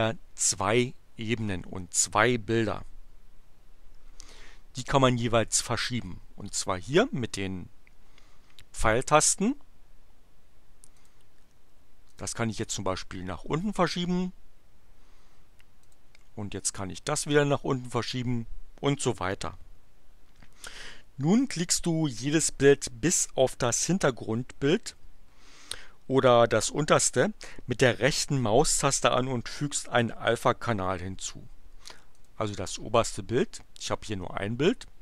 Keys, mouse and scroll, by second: 11.0 click, 12.1 click, 15.8 click, 17.2 click, 32.1 click.